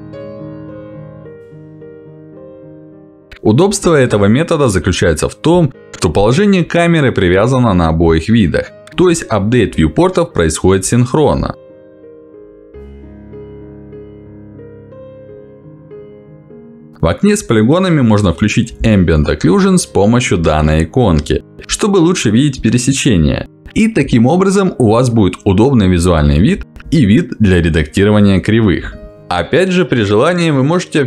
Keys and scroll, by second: 1.9 space, 24.3 Escape.